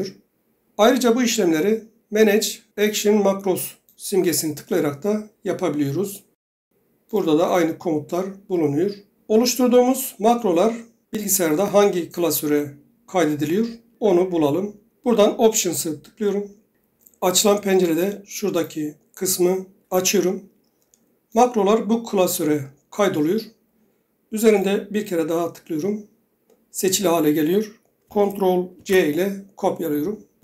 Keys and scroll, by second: 28.7 ctrl+c.